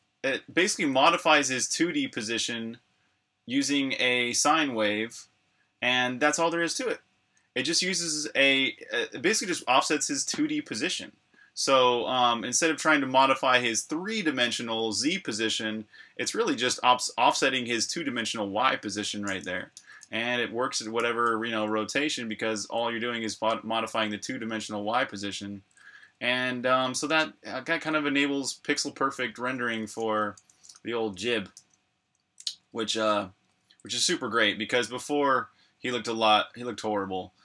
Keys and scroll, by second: 0.0-1.3 typing, 9.6 k, 19.8 c, 20.9-21.2 typing, 22.6 typing, 23.8-33.2 typing, 34.7 typing.